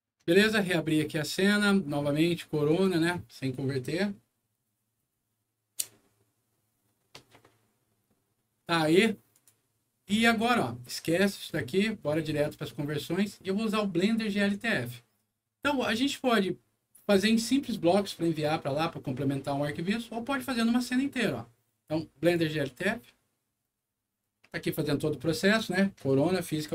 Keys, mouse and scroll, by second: 0.6 click, 2.6 click, 9.2 click, 11.2 click, 22.1 click.